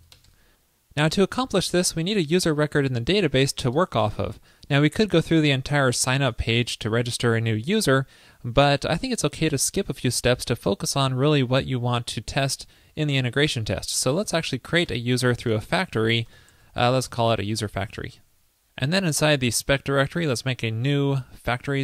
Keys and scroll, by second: 17.7 super+s.